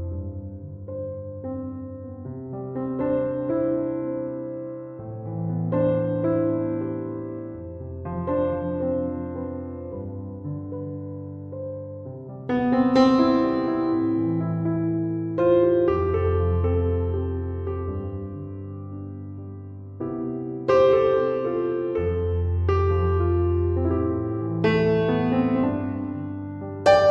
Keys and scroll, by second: 11.0 3, 11.5 Return, 18.8 1, 21.1 Return, 23.0 ctrl+7.